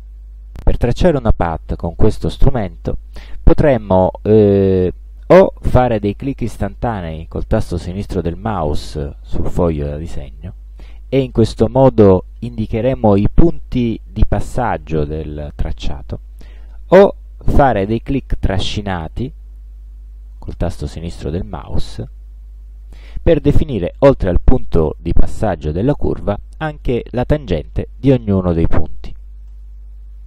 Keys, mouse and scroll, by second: 0.3 click, 6.5 click, 7.6 click, 8.5 click, 9.6 click, 10.9 click, 18.6 click, 20.4 click, 22.1-22.8 drag, 29.5 right click.